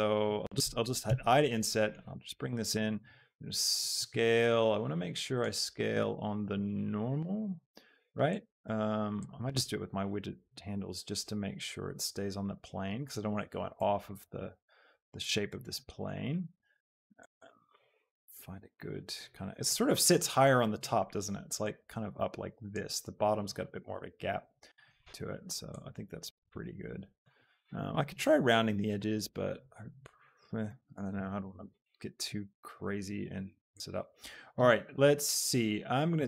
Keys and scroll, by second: 1.2 i, 3.1 s, 4.2 Escape.